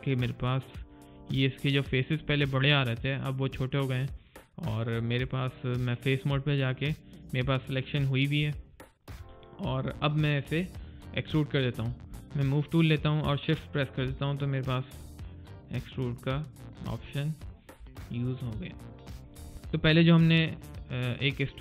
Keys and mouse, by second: 3.3 alt+right click, 4.9 alt+click, 5.3 alt+right click, 5.7 alt+click, 9.8 alt+right click, 10.1 alt+click, 10.6 alt+middle click, 10.9 alt+right click, 11.2 alt+click, 14.3 alt+click, 17.0 alt+right click, 17.3 alt+click, 17.7 alt+middle click, 18.1 alt+click, 19.5 alt+right click.